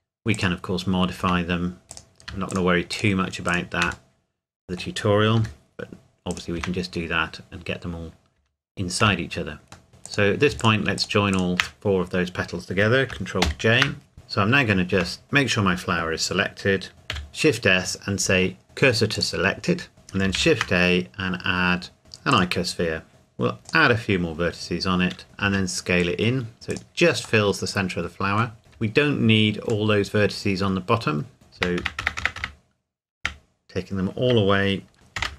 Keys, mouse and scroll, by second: 0.3 click, 0.8-1.2 scroll up 1, 1.2 Tab, 1.9 click, 2.5 shift+click, 4.1 middle click, 5.4 g, 6.3 click, 6.6 Tab, 6.9-8.4 scroll down 1, 8.4 Tab, 9.9 middle click, 10.1 click, 10.6 shift+click, 13.5 ctrl+j, 14.1 KP_7, 14.9 Tab, 15.2 click, 17.1 shift+s, 19.1 click, 20.3 shift+a, 22.3 click, 23.9 click, 25.4 s, 26.7 click, 27.4 middle click, 28.6-29.0 scroll up 1, 29.0 Tab, 29.9 middle click, 31.6 ctrl+KP_Add, 35.2 ctrl+KP_Subtract.